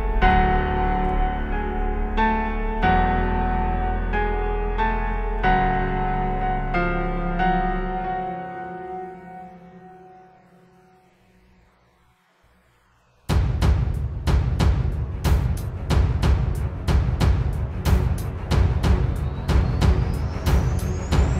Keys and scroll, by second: 0.4 space, 5.0 super+z, 5.1 space, 5.4 space, 5.8 space, 9.4 space, 16.1 space.